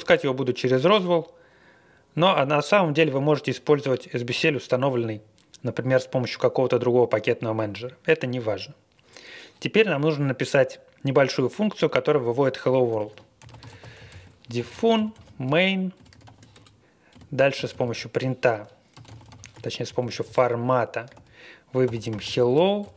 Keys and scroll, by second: 1.0 Return, 12.9-22.9 typing.